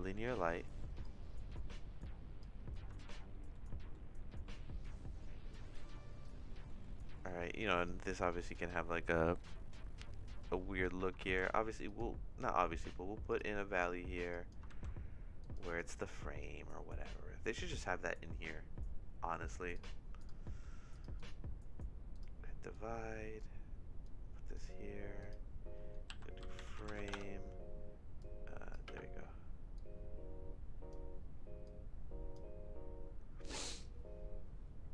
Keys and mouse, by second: 1.1-2.4 drag, 3.0 shift+middle click, 3.7 middle click, 4.8-6.2 drag, 7.8-10.8 drag, 13.3 click, 14.4 click, 14.8 shift+a, 20.5 middle click, 20.9 click, 21.3 click, 22.7 click, 24.0 click, 25.2-27.4 drag, 28.3 click, 28.8 space, 29.7-30.9 drag, 31.6 click.